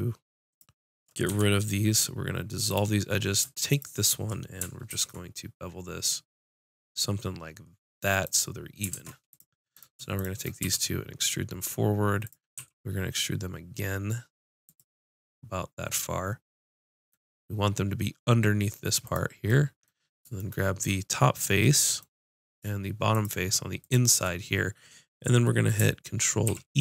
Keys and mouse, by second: 1.3 x, 2.4 middle click, 3.7-5.7 drag, 4.9 ctrl+b, 8.3-12.1 drag, 8.9 ctrl+Tab, 10.6 e, 12.2 e, 12.3 click, 12.5 e, 19.0-20.7 drag, 23.1-25.6 drag, 26.4 ctrl+e.